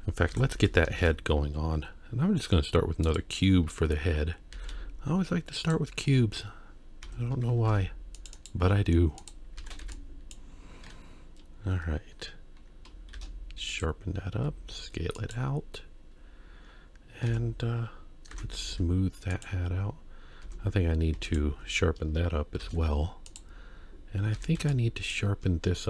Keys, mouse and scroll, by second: 0.3 Tab, 0.6 KP_1, 1.0 shift+a, 3.4-4.5 scroll down 4, 4.5 g, 5.9-6.7 scroll up 3, 7.5 Tab, 7.7 ctrl+r, 8.6 z, 9.6 alt+a, 9.8 b, 13.2 shift+e, 14.4 s, 17.3 Tab, 18.3 ctrl+3, 18.7 z, 20.4 Tab, 21.3 alt+click, 22.6 shift+e, 24.3 alt+a, 24.6 b.